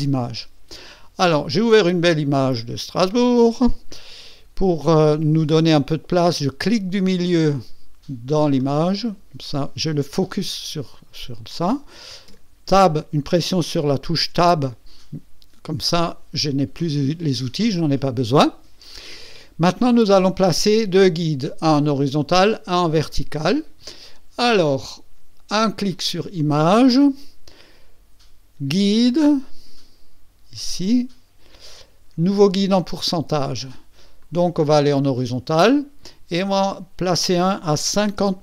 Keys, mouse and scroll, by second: 8.6 click, 12.3 Tab, 25.9 click, 32.7 click, 34.2 click, 35.0 click, 36.4 click, 37.8 KP_5, 38.2 KP_0.